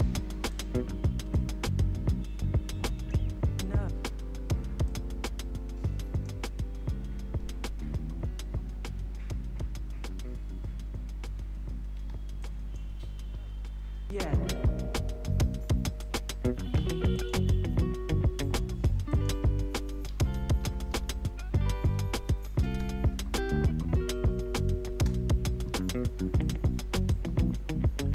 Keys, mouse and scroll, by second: 0.5-7.6 drag, 7.6 space, 11.9 space, 12.4 click, 13.3 typing, 16.0 click, 17.5 [, 18.4 click, 19.3 [, 20.0 ctrl+a, 20.9 alt+[, 21.4-22.6 typing, 24.9 space, 25.7 -, 26.4-28.1 drag.